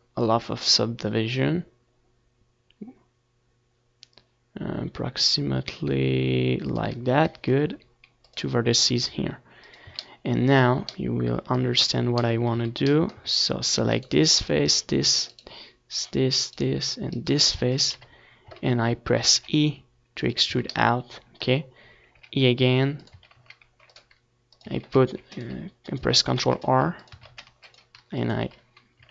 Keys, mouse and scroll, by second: 0.0 ctrl+r, 2.3 z, 2.5-3.5 middle drag, 5.0 z, 5.6 z, 6.3-10.9 right drag, 10.2 KP_7, 10.7 z, 11.5 e, 12.6-14.3 drag, 12.7 z, 14.3 e, 15.3-25.2 drag, 15.3 a, 15.7 ctrl+r, 16.7 a, 17.1 ctrl+r, 17.9 a, 18.2 ctrl+r, 19.0 a, 19.3 ctrl+r, 20.4 a, 21.1 ctrl+r, 21.8 a, 22.2 ctrl+r, 23.2 Tab, 25.4 ctrl+s, 26.9 ctrl+s.